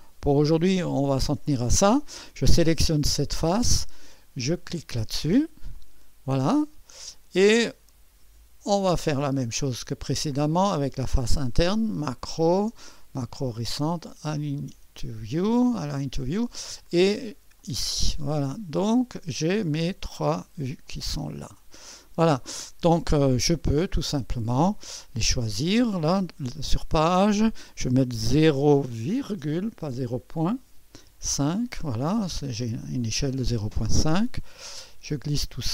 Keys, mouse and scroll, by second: 0.0 click, 0.6 drag, 4.6 click, 5.8 click, 7.1 click, 7.8 click, 9.0 click, 9.7 click, 11.9-12.9 drag, 14.1 click, 17.6 click, 18.3 click, 18.8 click, 19.4-19.9 scroll down 1, 19.4 click, 20.9-22.4 drag, 23.3-24.1 scroll down 1, 24.1-24.5 scroll down 1, 24.5 click, 25.3 click, 27.0 click, 28.2-28.9 typing, 30.7-31.1 typing, 31.4 Return, 32.7-34.5 scroll up 1, 32.7 typing, 34.5-35.7 drag.